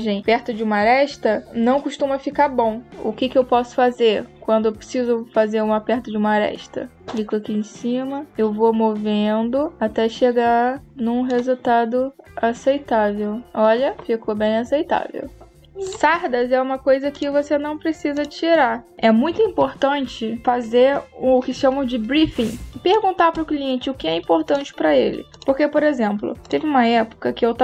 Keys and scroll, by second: 22.1 space.